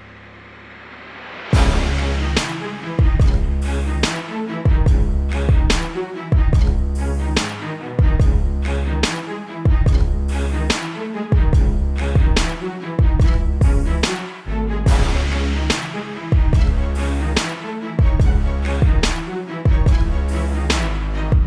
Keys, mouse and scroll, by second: 0.4 click, 6.6 right click, 7.7 click, 9.9 b, 11.1 click, 14.4 click.